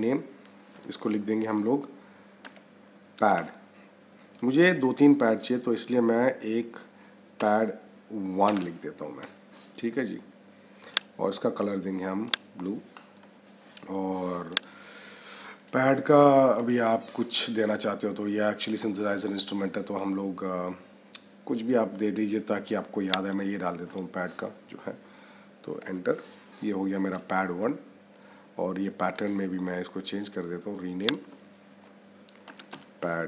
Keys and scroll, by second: 2.3 p, 3.3 d, 7.3 -, 8.4 1, 25.7 Return, 32.4 p.